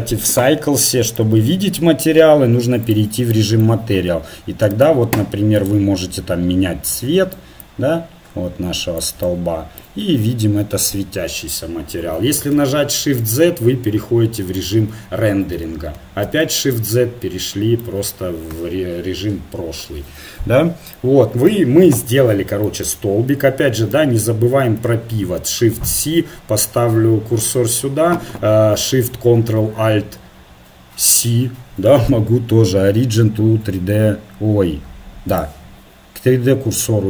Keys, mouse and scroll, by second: 4.7 click, 5.6-7.0 right drag, 7.0 click, 9.2-13.4 middle drag, 12.6 shift+z, 16.3 shift+z, 21.8 KP_1, 25.2 shift+c, 31.0 ctrl+alt+shift+c, 36.5-37.0 middle drag.